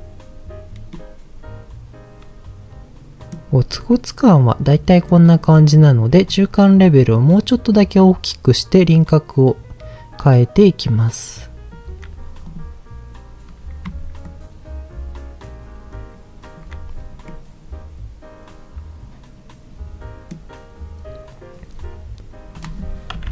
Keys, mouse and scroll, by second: 0.9-3.3 middle drag, 3.9-5.2 middle drag, 6.3-11.8 shift+drag, 12.4 click, 14.2-16.6 shift+drag, 17.3-20.2 middle drag, 20.2 middle click, 21.5 scroll down 2, 22.6-23.3 drag, 22.6 scroll down 1.